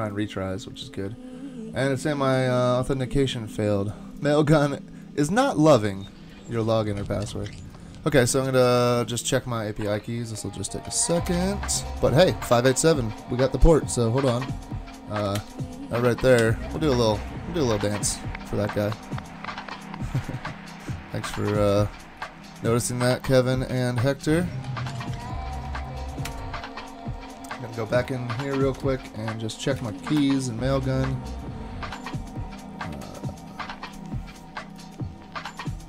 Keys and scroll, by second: 11.3 alt+super+0, 15.7 alt+super++, 16.4 alt+super+-, 26.2 alt+super+0.